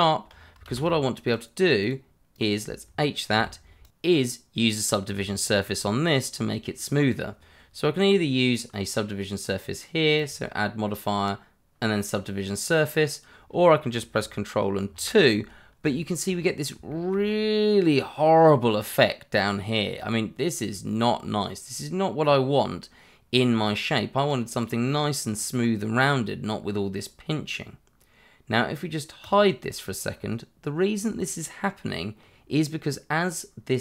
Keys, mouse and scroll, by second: 0.0 Tab, 0.6 shift+z, 1.2 click, 3.3 h, 3.8 click, 4.1 shift+middle click, 4.3-5.6 scroll up 1, 6.1 shift+middle click, 10.2 click, 14.8 ctrl+2, 16.0 shift+middle click, 16.3 scroll up 1, 16.9 shift+middle click, 17.2 scroll up 1, 18.7-19.7 scroll down 1, 19.7 scroll up 1, 21.2-23.3 scroll down 1, 24.5 click, 25.2-26.0 scroll up 1, 29.2 click, 30.2 scroll down 1, 32.1 scroll up 1.